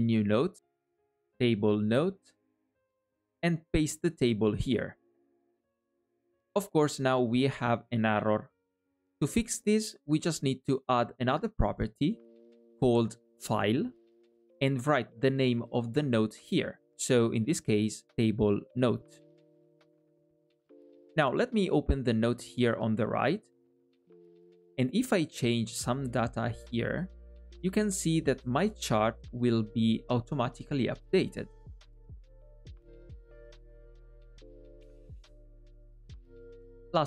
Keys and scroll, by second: 3.4 super+v.